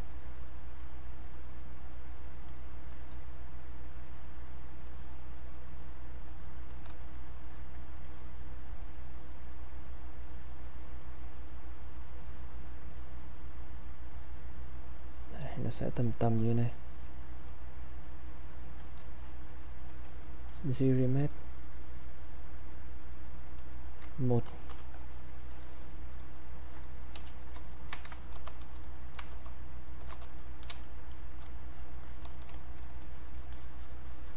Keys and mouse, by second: 0.8-3.6 drag, 3.6 click, 4.9-6.7 drag, 7.5 alt+click, 8.1-11.0 drag, 11.0 click, 12.1-17.5 drag, 17.5 click, 20.4 click, 27.1 q, 27.7 ctrl+right click, 28.3 shift+f, 29.3 shift+f, 30.4 shift+click, 30.7 shift+space, 31.2 click, 31.3 space, 31.7 shift+click, 33.0-34.3 shift+drag.